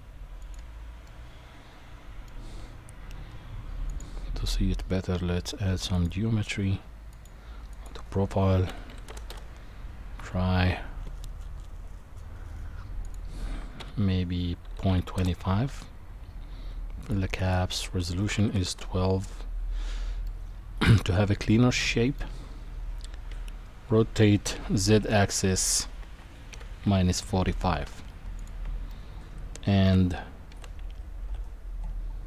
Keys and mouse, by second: 1.1-2.3 middle drag, 3.9 click, 6.0 click, 7.1-9.3 drag, 13.0-15.2 drag, 17.0 click, 17.4-18.7 drag, 20.3-22.2 middle drag, 23.3 r, 28.9-29.9 middle drag, 31.4 g.